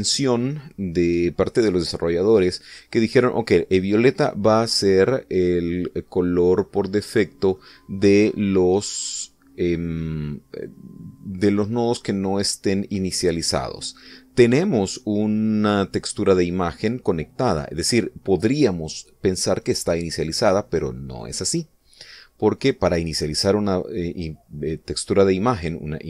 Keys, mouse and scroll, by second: 6.1-8.7 middle drag, 11.6-13.3 drag.